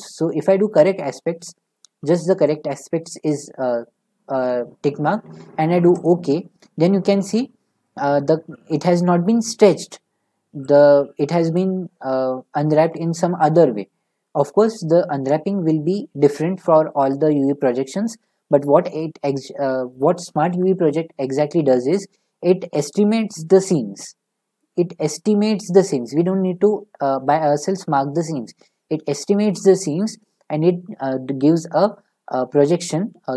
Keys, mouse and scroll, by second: 0.9 click, 6.0-9.0 drag, 11.5-14.7 drag.